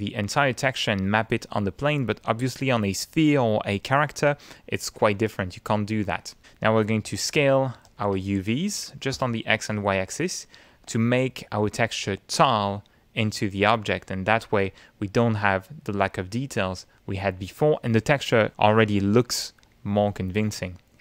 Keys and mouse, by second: 6.7 click, 7.9 2, 8.2 Tab, 8.7 2, 8.9 Tab, 10.0 Return, 11.2-12.5 middle drag, 13.0 middle click, 14.6-15.7 middle drag, 16.7-18.3 middle drag, 19.0 shift+middle click.